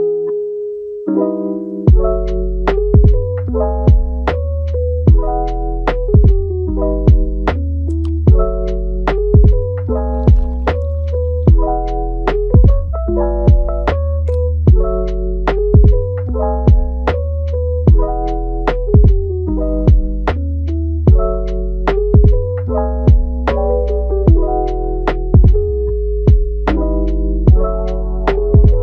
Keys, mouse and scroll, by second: 0.2 click, 0.7 Tab, 1.0 click, 1.5 alt+s, 2.6 g, 3.4 middle click, 3.9 e, 5.0 Tab, 5.4-6.1 middle drag, 6.1 click, 6.4 Tab, 6.8 click, 8.0 click, 8.5 shift+click, 9.0 shift+click, 9.7 shift+click, 10.0 shift+click, 10.5 shift+click, 11.1 Tab, 12.7 alt+s, 14.6 e, 16.3-17.3 middle drag, 17.3 g, 19.0 scroll down 3, 19.3-20.9 middle drag, 20.9 ctrl+t, 21.9 a, 22.4 ctrl+t, 25.2 middle click, 25.7 Tab, 26.1-27.6 middle drag, 27.6 Tab, 28.4 ctrl+t.